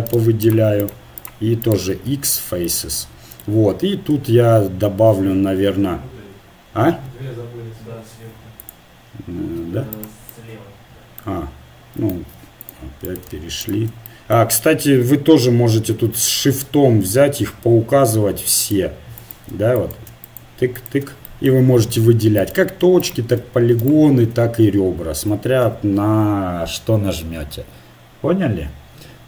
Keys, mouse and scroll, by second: 2.1 x, 4.1 ctrl+r, 12.1 ctrl+Tab, 13.1-15.5 right drag, 15.6 middle click, 18.6-22.8 drag, 21.3-23.4 middle drag, 23.4-25.5 right drag, 25.5 middle click, 25.6 x.